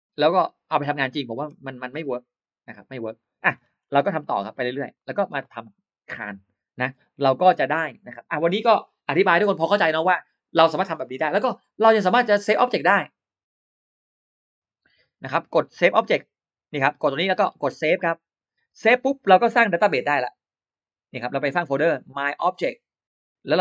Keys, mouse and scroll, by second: 3.4-3.7 scroll down 2, 3.7 middle click, 4.3 scroll up 2, 4.4 middle click, 4.5 scroll down 2, 4.8 scroll up 2, 4.8 middle click, 12.6 click, 13.6 click, 15.0 click, 16.8 click, 18.3 click, 20.5 click, 21.3 right click.